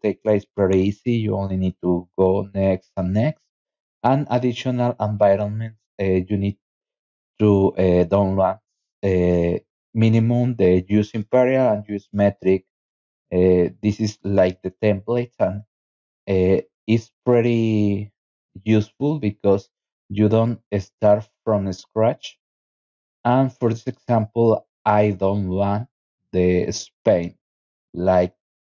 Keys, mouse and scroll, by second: 0.3-0.9 scroll down 4, 2.1 scroll down 2, 2.9 click, 3.6 scroll down 2, 4.5 scroll up 2, 6.6-7.2 scroll down 4, 10.6-11.5 scroll up 4, 11.8 scroll down 2, 12.7 scroll up 2, 13.4-13.8 scroll up 2, 14.2 scroll up 2, 15.5 scroll down 2, 16.1-17.2 scroll up 6, 18.3-18.9 scroll down 2, 20.8 click, 24.0 click, 25.9-26.5 scroll up 3, 27.1 click.